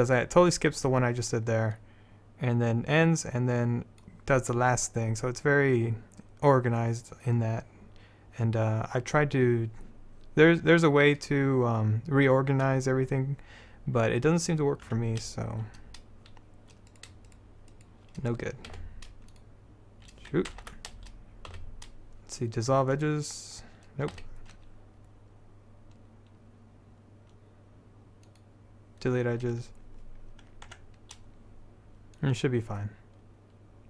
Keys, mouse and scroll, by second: 1.9-3.9 drag, 15.0 Tab, 17.0-18.4 drag, 18.6 click, 18.9 x, 20.7 ctrl+z, 21.6 x, 24.3 x, 30.8 Tab, 32.3 click.